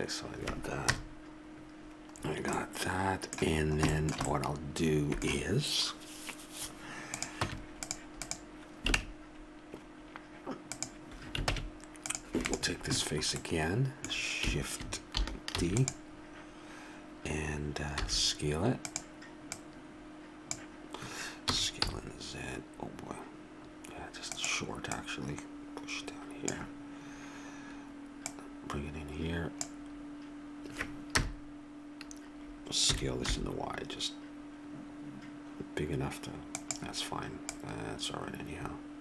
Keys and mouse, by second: 0.9 KP_0, 2.7 middle click, 3.5 middle click, 4.0 middle click, 7.1 click, 7.4 Tab, 9.0 Tab, 11.5 ctrl+Tab, 15.6 shift+d, 18.0 s, 19.5-21.3 drag, 21.5 s, 25.0-30.2 drag, 31.1 KP_0, 32.8 s, 37.5-39.0 drag.